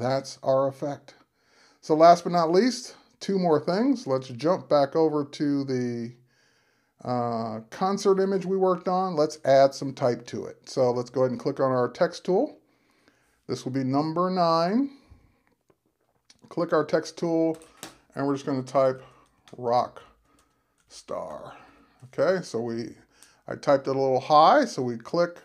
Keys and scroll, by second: 18.7-22.1 typing.